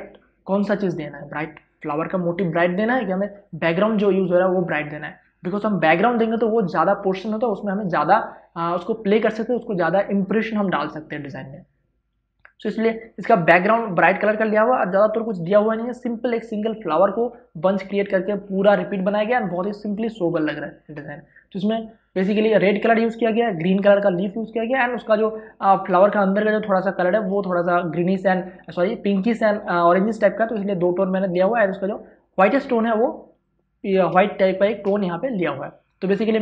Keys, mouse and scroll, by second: 26.0 space, 34.1 space, 34.3 ctrl+click.